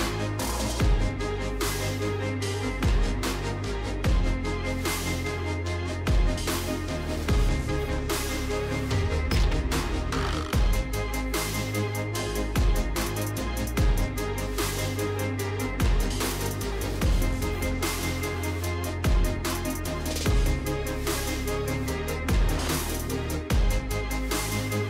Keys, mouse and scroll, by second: 0.9 i, 2.3-3.8 typing, 5.8 click, 5.9-8.3 typing, 6.1 click, 7.8 click, 10.4-10.7 typing, 11.3 Tab, 12.3 click, 12.3-15.8 typing, 16.6 Tab, 17.2-18.9 typing, 20.4 typing, 22.1-24.0 typing, 22.7 alt+click, 23.3 alt+click, 23.7 click.